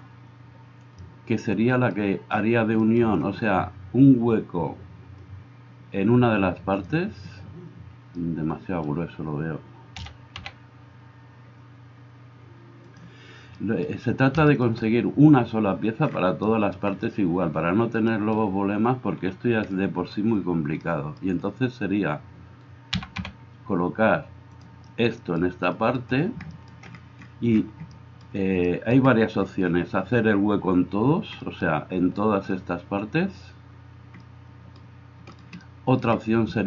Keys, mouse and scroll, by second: 10.1 s, 23.0 g.